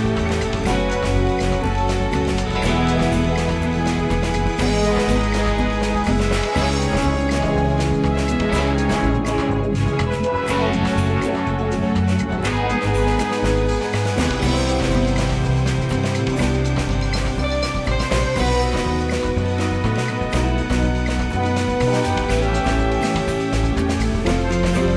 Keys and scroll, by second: 8.4 space, 15.1 space, 16.6 space, 18.7 space, 19.3 space, 22.9 space, 24.7 space.